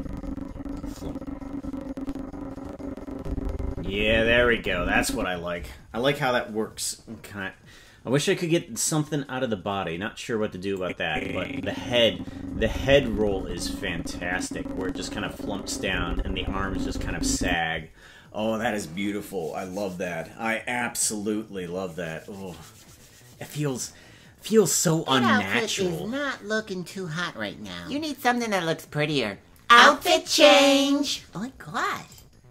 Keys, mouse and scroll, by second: 10.8-17.5 drag.